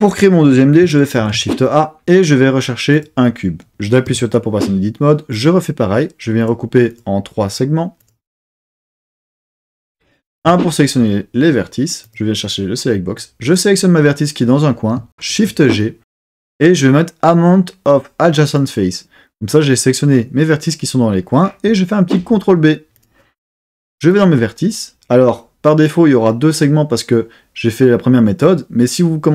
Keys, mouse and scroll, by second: 1.2 shift+a, 4.1 Tab, 5.3 click, 6.4 click, 6.9 click, 7.5 click, 8.0 click, 8.4 click, 8.8 click, 9.2 click, 9.5 click, 9.8 click, 10.4 1, 12.0 click, 13.1 click, 15.3 shift+g, 22.2 super+b, 22.9 click, 24.1 click.